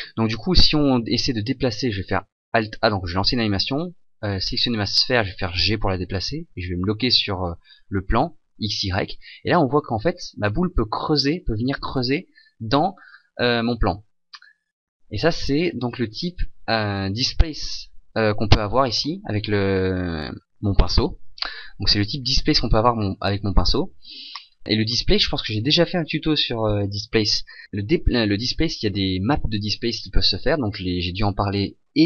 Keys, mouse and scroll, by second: 1.2 scroll down 1, 2.8 alt+a, 4.7 right click, 5.2 g, 16.8 right click.